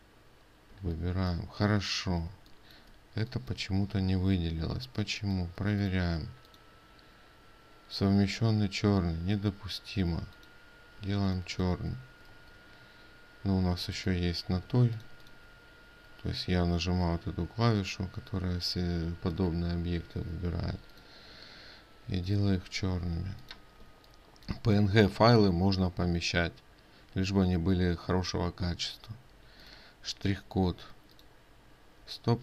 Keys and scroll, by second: 11.6 ctrl+space, 13.0 ctrl+z.